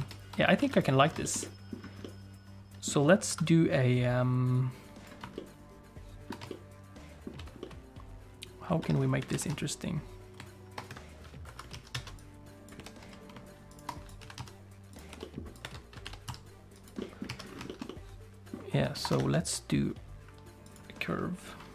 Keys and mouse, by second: 0.0 ctrl+space, 0.6 alt+a, 1.2 shift+middle click, 1.4 middle click, 2.0 middle click, 3.3 KP_1, 4.5 click, 5.3-6.4 middle drag, 6.5 shift+middle click, 7.6-8.8 middle drag, 8.8 Tab, 9.2 a, 9.3 s, 11.4 KP_1, 11.7 alt+z, 11.9 alt+a, 12.2 click, 12.8 g, 14.0 click, 14.2 s, 15.1 g, 15.6 Tab, 16.0 g, 17.0 middle click, 17.3 alt+z, 17.7 shift+middle click, 17.9 middle click, 19.0 ctrl+s, 19.2 shift+a.